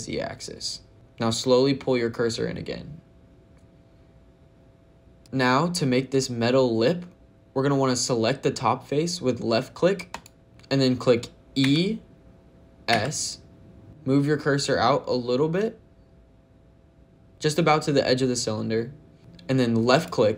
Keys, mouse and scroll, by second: 5.1 click, 5.2 shift+click, 5.2 shift+middle click, 10.0 click, 11.5 e, 12.8 s, 19.8 click.